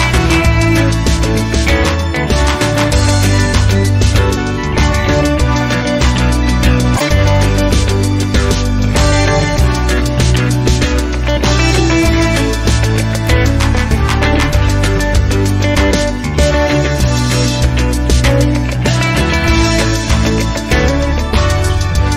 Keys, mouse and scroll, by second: 0.0-1.5 drag, 2.4 click, 3.7 click, 4.2 click, 6.0-6.6 scroll up 1, 7.1-7.9 scroll down 1, 7.9-12.0 drag, 12.1 0, 12.8 scroll down 2, 14.0 click, 15.6 click, 16.8-22.1 drag.